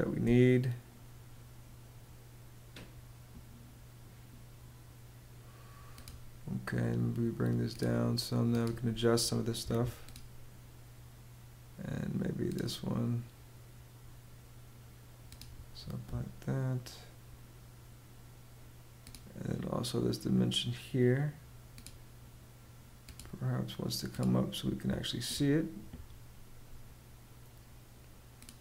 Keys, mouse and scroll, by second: 9.1 Escape, 15.3 ↺, 24.1 ↺.